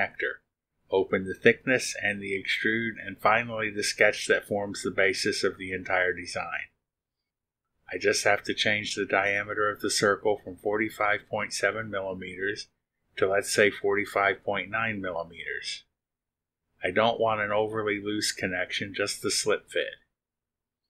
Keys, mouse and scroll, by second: 0.5 scroll down 1, 4.8 click, 8.3 click, 8.9 click, 15.5 click, 18.5 click.